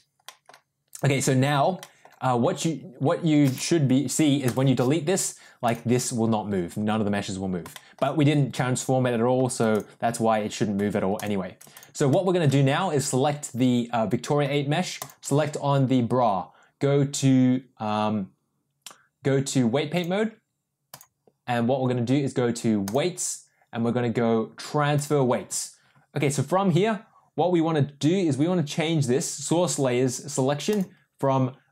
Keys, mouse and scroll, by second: 0.2 middle click, 1.8 middle click, 4.6 Delete, 5.6 click, 7.7 middle drag, 9.6 click, 12.0-12.4 middle drag, 14.9 shift+click, 19.9-21.0 drag, 22.8-25.2 drag, 30.6-31.7 drag.